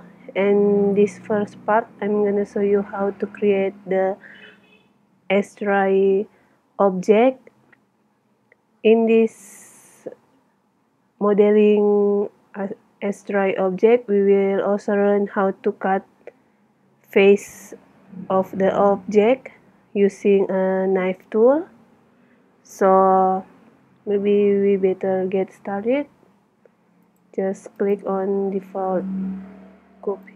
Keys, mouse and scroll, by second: 27.8-29.7 right drag, 28.9 x.